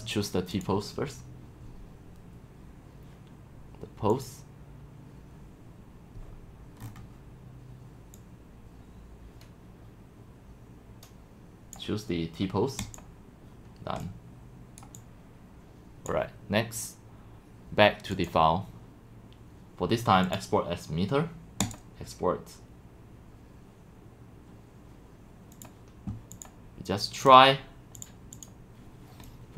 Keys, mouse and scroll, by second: 0.5-2.4 drag, 3.2 click, 4.1 right click, 6.8-7.5 scroll, 7.5 scroll, 8.2-9.2 drag, 9.2-10.1 scroll down 6, 10.1-11.7 drag, 12.8 click, 14.1 scroll up 1, 15.0-15.4 drag, 15.5-17.0 drag, 18.1-20.0 drag, 21.6 right click, 28.0 click, 28.5 click.